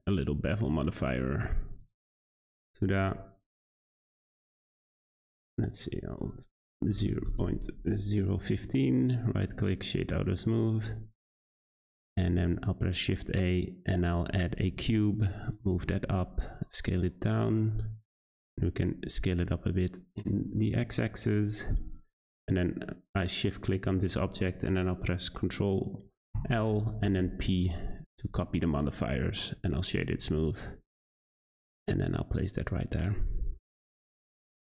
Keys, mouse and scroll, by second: 3.5-8.6 drag, 9.0-9.6 right drag, 9.6 click, 10.0 middle click, 10.3-10.9 scroll up 3, 10.9 `, 11.9-12.5 scroll down 1, 12.5 shift+a, 14.3-14.6 scroll down 3, 14.7 g, 15.6 Tab, 15.8 a, 15.9 s, 18.5 s, 20.8-21.1 scroll up 3, 21.1 Tab, 22.3 shift+click, 26.3 ctrl+l, 28.1 click, 28.3 click, 28.7-29.4 right drag, 29.4 click, 29.7 click, 30.0 g, 33.2 click, 33.5 scroll down 4, 33.8-34.6 middle drag.